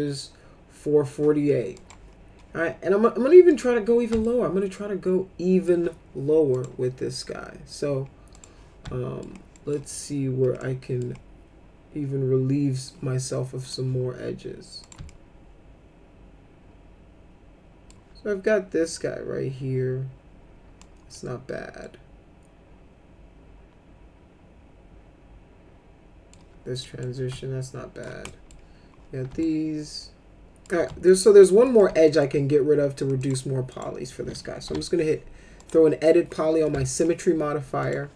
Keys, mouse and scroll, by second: 1.7 click, 3.5 click, 4.2-5.6 alt+middle drag, 6.5 click, 8.3 click, 8.8 alt+middle click, 9.5 middle click, 10.6 middle click, 13.6 click, 14.8 click, 15.0-17.8 alt+middle drag, 20.7 middle click, 21.8-26.3 alt+middle drag, 26.8 middle click, 27.3 alt+middle click, 28.2 middle click, 29.4-30.6 alt+middle drag, 30.8 alt+middle click, 31.6 middle click, 32.0 alt+middle click, 33.2 click, 33.7 click, 34.6 e, 35.6 click, 36.6 alt+middle click, 37.8 click.